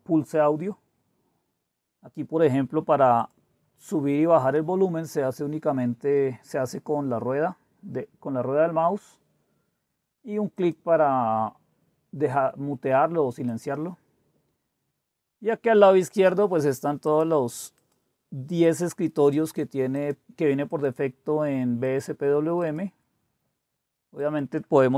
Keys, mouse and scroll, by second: 3.2 click, 5.3-5.8 scroll up 2, 5.8-8.8 scroll down 4, 8.8-9.3 scroll down 1, 9.3-10.6 scroll up 1, 10.6-12.0 drag, 13.4 click, 17.0 click, 17.5-18.8 drag, 19.3 click, 19.9 click, 20.7 click, 21.8 click, 22.6 click, 24.2 click.